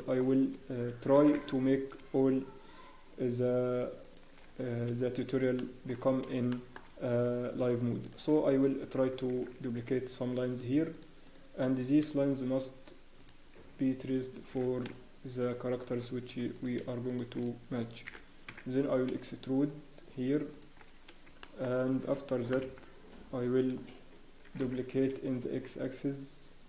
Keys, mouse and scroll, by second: 0.3 scroll up 1, 1.1 shift+d, 4.4-4.8 scroll down 1, 4.9 scroll up 1, 5.6 shift+middle click, 5.6 scroll down 4, 5.9 scroll up 1, 6.5 shift+middle click, 6.5-6.9 scroll up 3, 7.6 click, 8.0 shift+click, 8.9 shift+d, 11.2 click, 16.5 click, 17.1 shift+click, 17.5 scroll down 1, 18.0 e, 21.0 scroll down 1, 21.4 shift+middle click, 22.5 ctrl+l, 23.1 scroll up 1, 23.8 scroll down 1, 24.4 scroll up 1, 24.4 shift+d.